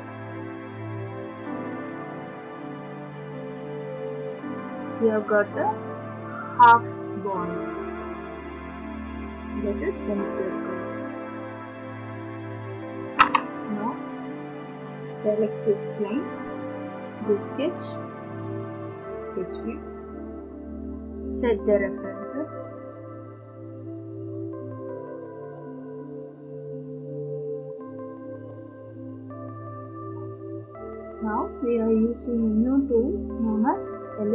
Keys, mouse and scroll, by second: 1.9 click, 4.0 click, 4.9 scroll, 8.1-8.9 scroll, 10.1 scroll, 15.9 click, 17.5 click, 19.3 click, 22.0 click, 23.8 click, 25.2 click, 26.7 click, 27.6 click, 28.5-28.8 scroll, 29.1 scroll, 29.2 middle click, 30.2-31.7 scroll, 34.2 click.